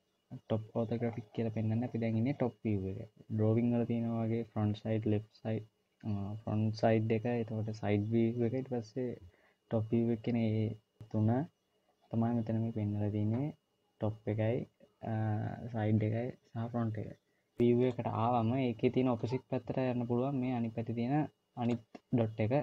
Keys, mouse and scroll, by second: 17.6 click, 18.2 click, 22.0 click.